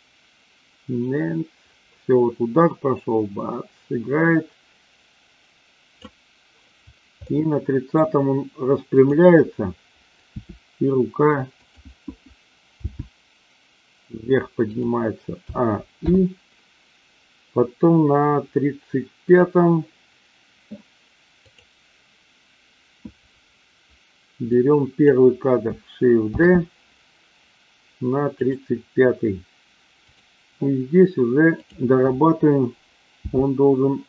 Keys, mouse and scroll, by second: 7.1 middle click, 9.0 click, 10.3 r, 11.5 click, 12.6 g, 14.6 click, 15.4 a, 16.0 i, 19.3 click, 21.4 click, 24.5-25.0 drag, 26.3 shift+d, 30.0 click, 33.2 g.